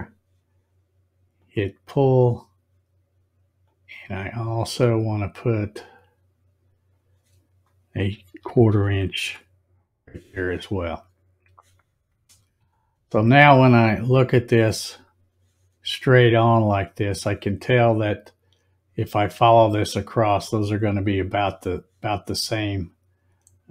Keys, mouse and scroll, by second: 1.4 click, 3.6-6.8 drag, 12.5 click, 13.8 click, 14.9 click, 16.4 click.